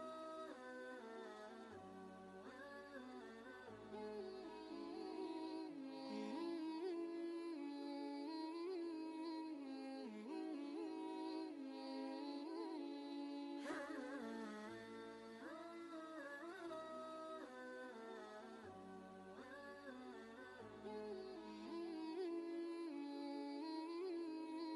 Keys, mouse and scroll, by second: 0.7 click, 2.0 alt+Tab, 3.4 ctrl+v, 4.1 ctrl+space, 4.2-6.1 ctrl+drag, 6.7 ctrl+space, 6.9 ctrl+click, 8.1 click, 8.4 space, 13.5 space, 13.5 click, 16.8 click, 17.5 ctrl+shift+g, 18.3 i, 20.2-21.1 typing, 21.1 click, 24.0 ctrl+space, 24.2 ctrl+click, 24.6 ctrl+space.